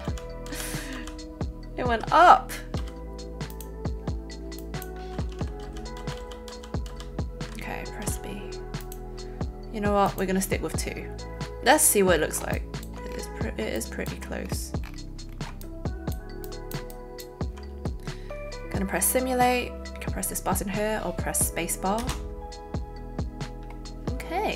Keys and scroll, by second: 0.0 ctrl+z, 0.9 ctrl+z, 2.7 b, 5.6 ctrl+z, 6.2 ctrl+z, 6.8 ctrl+z, 8.0 ctrl+b, 22.0 space.